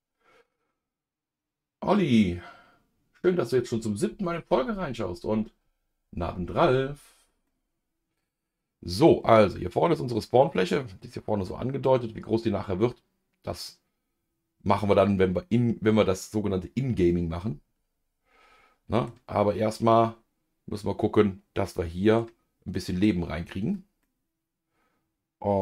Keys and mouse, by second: 7.5-9.2 middle drag, 13.8-19.4 middle drag, 19.9-22.7 middle drag, 24.6-25.6 middle drag.